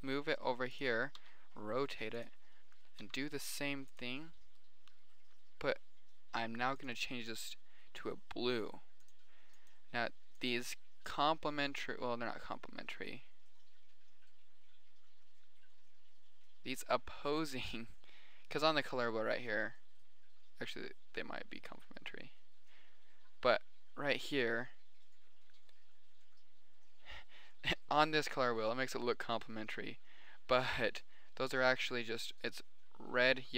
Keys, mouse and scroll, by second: 1.5 r, 3.3 g, 4.5 middle click, 5.7 click, 9.9 middle click, 10.5 middle click, 11.7 middle click, 12.9-15.4 middle drag, 15.9 middle click, 17.1-18.4 middle drag, 18.9 middle drag, 19.5-22.1 middle drag, 22.5 middle click, 23.7 middle click, 24.9-26.0 middle drag, 26.1 middle click, 26.7 middle click, 27.3-28.3 middle drag, 28.5-29.1 middle drag.